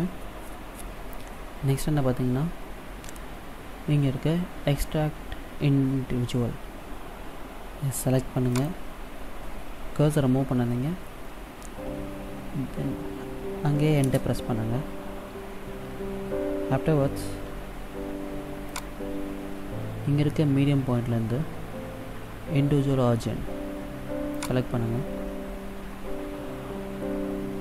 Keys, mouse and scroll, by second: 8.7 click, 18.9 click, 25.6-26.6 scroll up 1, 26.6-27.6 scroll up 1.